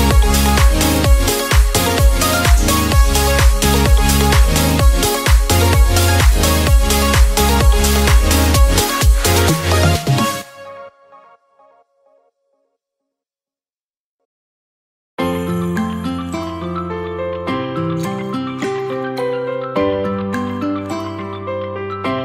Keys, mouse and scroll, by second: 0.3 s, 2.0 click, 3.1-3.7 scroll down 3, 3.7 middle click, 4.3 KP_7, 5.6 shift+d, 7.2 shift+d, 12.2 shift+d, 13.7-14.7 middle drag, 14.7 click, 16.6 s, 18.7 shift+d, 19.5 click, 21.4-22.2 middle drag.